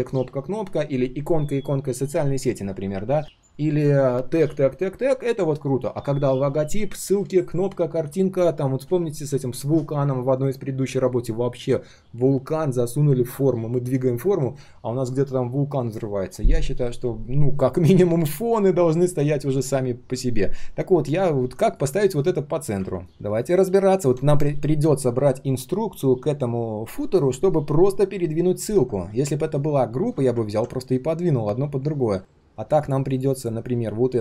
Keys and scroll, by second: 22.1 alt+h, 29.0 ctrl+z, 29.5 ctrl+z, 29.9 ctrl+z.